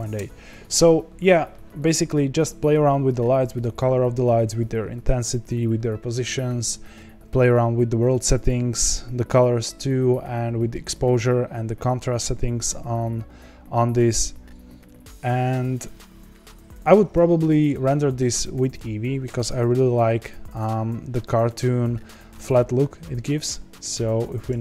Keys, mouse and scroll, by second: 19.8-20.8 scroll up 3, 22.7-24.6 scroll down 2.